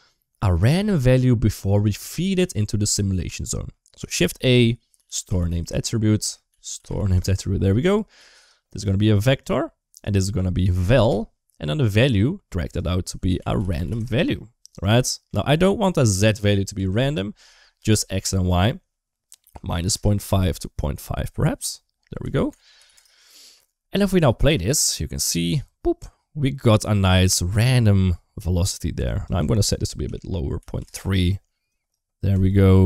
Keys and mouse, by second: 1.0 click, 2.1 middle click, 3.4 middle click, 3.9 shift+a, 6.1 shift+a, 8.0 g, 8.5 click, 9.8-10.8 drag, 12.3 click, 12.5-14.7 drag, 14.9 shift+middle click, 16.0-17.6 drag, 17.9-19.8 drag, 20.6-22.8 drag, 24.0 click, 24.2 space, 28.2 space, 28.9-30.7 drag, 31.6 click, 32.4-32.8 drag.